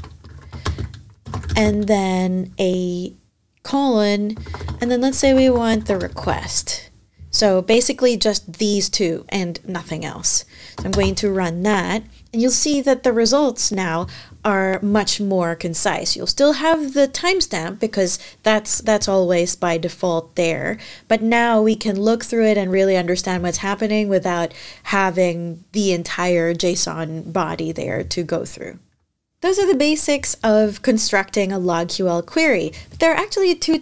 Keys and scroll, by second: 0.0-1.7 typing, 3.9-6.5 typing, 10.7 shift+Return.